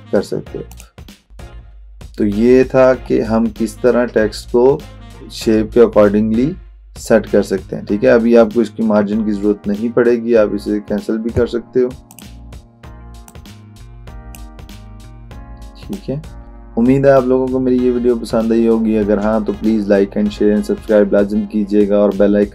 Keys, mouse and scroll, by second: 0.7 click, 12.2-14.6 drag.